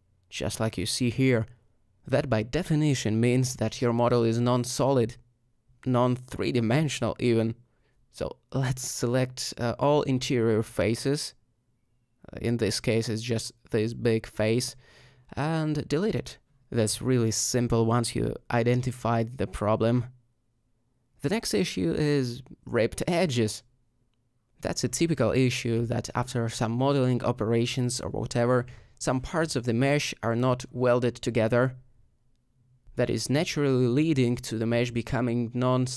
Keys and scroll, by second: 11.4 ctrl+z, 11.7 g, 15.1 x, 18.9 alt+z, 20.4 alt+h, 21.6 alt+shift+h, 29.3 alt+Tab, 33.9 alt+Tab.